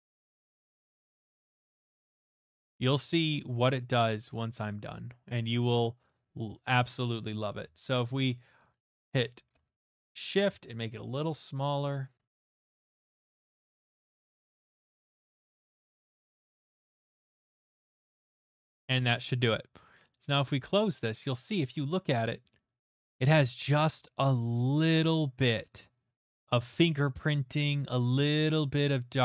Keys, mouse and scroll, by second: 0.1 click, 1.2 click, 1.3 click, 1.8 click, 2.0 click, 2.7 click, 3.0 click, 3.9 click, 4.3 click, 5.3 click, 6.1 click, 6.4 middle click, 6.4 middle click, 8.1-9.5 alt+shift+drag, 9.5 alt+shift+right click, 10.3 alt+shift+click, 10.8 alt+shift+click, 12.0 alt+click, 13.7 alt+right click, 13.7 middle click, 13.9 click, 14.4 alt+right click, 14.7 middle click, 14.9 click, 15.0 click, 15.3 middle click, 15.6 click, 15.9 alt+right click, 16.1 click, 16.4 click, 16.7 middle click, 17.0 alt+right click, 17.1 click, 17.4 right click, 17.7 middle click, 18.0 click, 18.1 click, 18.2 click, 18.5 alt+middle click, 20.2-21.2 drag, 22.9 alt+middle click, 23.3 middle click, 26.1 middle click.